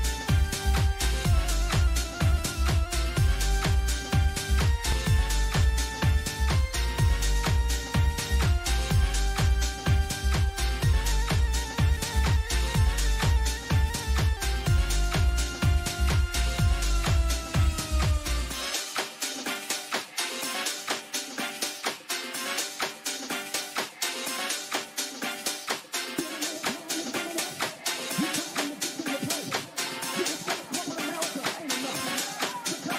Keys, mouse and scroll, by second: 10.3 click, 13.3 typing, 21.6 click, 24.0 click, 27.0 click.